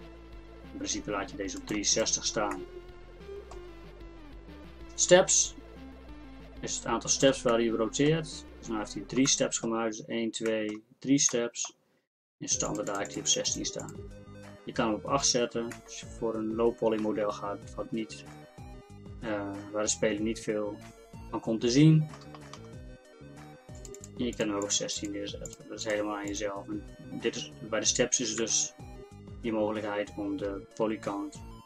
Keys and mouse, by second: 7.3 middle click, 12.7-17.2 middle drag, 17.8-23.8 middle drag, 23.8-28.4 drag, 30.7-31.6 middle drag.